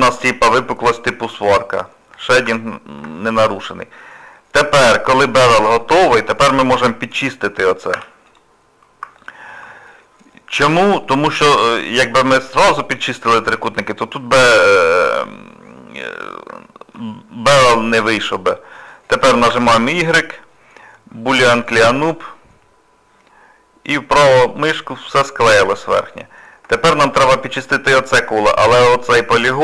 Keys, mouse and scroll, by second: 0.1 shift+middle click, 0.5 middle click, 2.1 scroll up 2, 2.4 Tab, 3.2 middle click, 3.9 scroll up 1, 3.9 scroll down 1, 4.1 scroll up 1, 4.3 middle click, 6.3 middle click, 7.9 2, 8.3 click, 9.2 alt+click, 10.0 middle click, 10.6 1, 11.0 middle click, 14.2 middle click, 16.6 shift+middle click, 17.7 middle click, 19.5 y, 24.9 scroll down 2, 25.3 middle click, 25.7 middle click, 26.4 scroll down 1, 26.4 scroll up 1, 26.7 shift+middle click, 28.1 middle click.